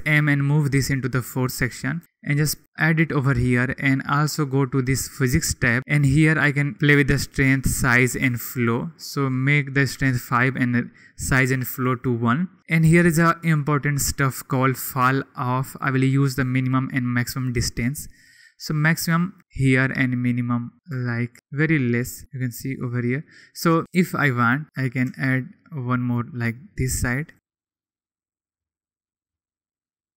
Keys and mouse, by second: 2.0 g, 2.5-3.7 drag, 4.7 click, 7.2 click, 8.1 click, 9.1 click, 16.1-19.4 drag, 20.7 shift+click, 23.1 click, 23.8 g, 25.0 shift+d, 26.1-27.3 drag.